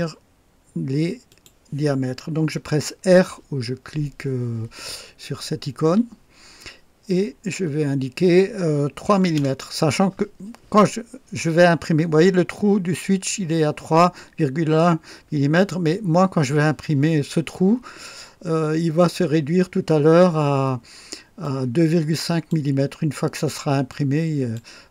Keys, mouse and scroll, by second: 1.2 click, 5.8 r, 9.0 KP_3, 9.3 KP_Enter, 11.2-11.5 scroll down 2, 14.8-15.2 scroll up 2, 21.4-22.7 drag, 23.9-24.7 drag.